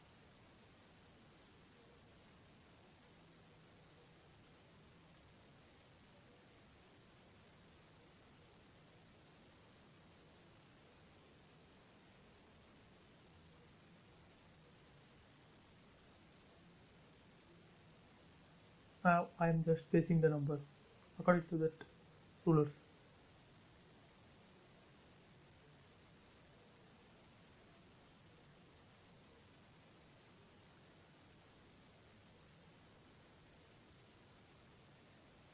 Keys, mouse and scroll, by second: 2.1 click, 4.2 middle click, 5.0 scroll up 1, 5.3-6.8 shift+middle drag, 6.8-7.1 scroll up 1, 7.1-8.5 middle drag, 8.4 click, 8.5 click, 11.1 typing, 12.1 click, 14.2 space, 14.6 click, 16.9 typing, 17.5 click, 17.6 click, 19.2-19.7 scroll up 1, 20.4 click, 20.7 scroll down 1, 21.2 space, 22.6 click, 24.9 4, 25.9 click, 28.5 click, 29.2 space, 30.2 click, 30.2 click, 32.2 5, 33.1 click, 35.1 space, 35.4-35.5 middle drag.